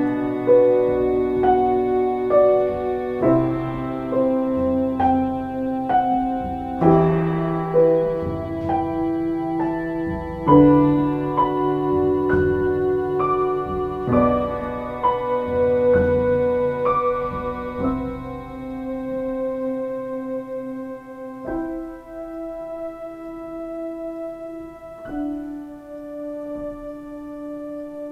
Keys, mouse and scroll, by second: 5.6 ctrl+z, 8.2 ctrl+space.